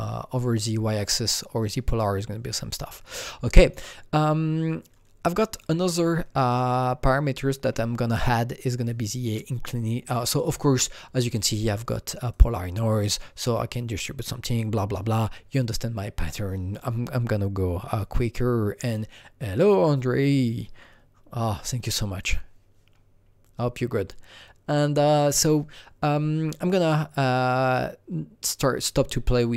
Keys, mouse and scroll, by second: 3.6-4.8 alt+drag, 4.8-5.5 scroll down 3, 5.5 click, 5.8 scroll down 2, 6.5 click, 10.4 click, 10.4-12.3 scroll down 1, 12.3-17.1 drag, 18.8 click, 19.6-22.2 drag, 22.2 click, 23.1-24.0 scroll down 1, 24.1-24.8 scroll down 3, 24.9 scroll down 2.